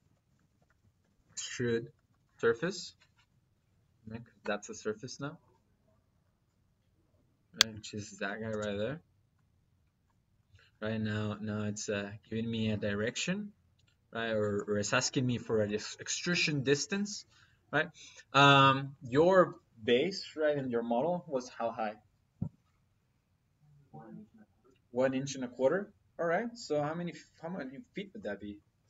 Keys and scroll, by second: 0.2-1.2 typing, 1.8 Down, 4.2 Return, 8.3 space.